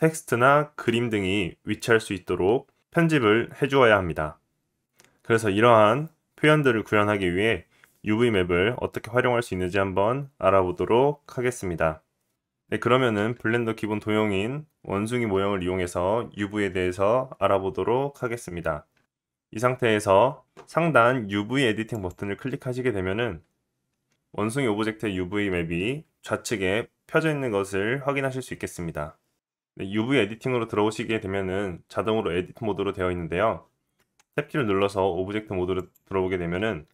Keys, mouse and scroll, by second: 11.9 right click, 11.9 middle click, 12.4 middle click, 13.1-13.6 scroll up 1, 13.6-14.4 drag, 13.6-14.4 middle drag, 13.6-22.1 right drag.